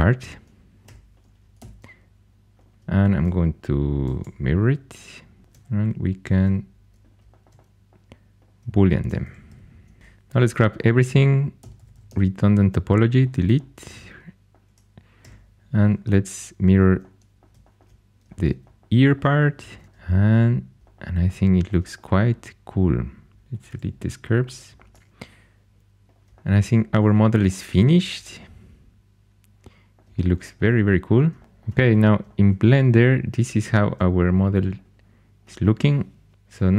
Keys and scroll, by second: 0.8 4, 1.5 x, 4.1 alt+x, 5.4-6.3 typing, 9.1-10.0 typing, 11.3-12.5 typing, 15.1 4, 19.6 alt+x, 23.8 x.